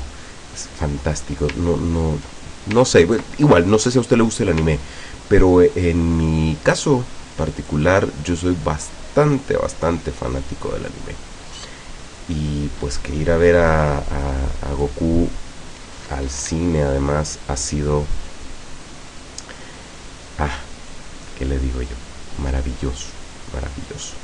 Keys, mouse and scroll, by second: 3.0 ctrl+scroll down 2, 3.7 ctrl+click, 4.9 ctrl+scroll up 2, 5.5 ctrl+scroll up 2, 6.9 click, 7.7 click, 8.9-15.1 drag, 21.0-24.2 drag.